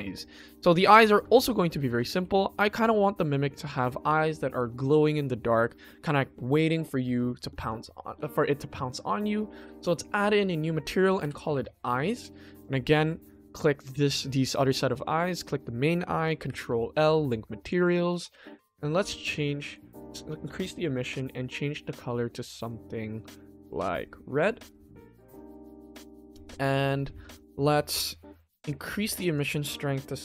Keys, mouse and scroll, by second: 0.1-0.5 shift+middle drag, 0.7-1.3 ctrl+middle drag, 1.4-1.9 shift+middle drag, 2.1 ctrl+s, 2.6 click, 9.7 click, 10.5-11.5 drag, 13.1 click, 15.4 shift+click, 16.4 ctrl+l, 17.6 click, 18.1 click, 18.7 shift+middle click, 19.6 click, 29.2-30.2 drag.